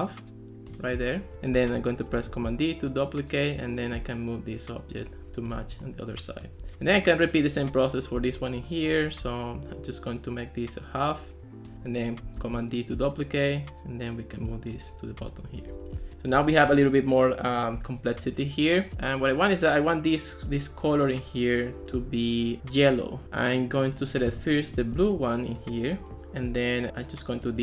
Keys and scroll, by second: 2.2 super+d, 12.4 super+d.